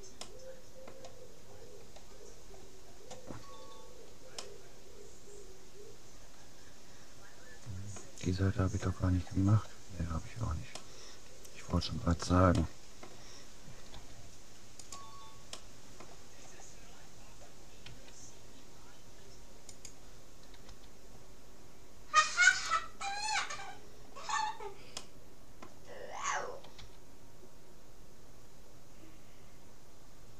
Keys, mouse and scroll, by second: 3.9-6.1 middle drag, 8.5-10.3 scroll up 1, 10.3-10.9 scroll down 1, 10.9-12.5 middle drag, 12.7 middle click, 12.9-13.9 drag, 13.9 g, 15.7-16.7 drag, 17.9 s, 20.7 g, 23.1-26.3 middle drag, 26.3 click, 26.9 g.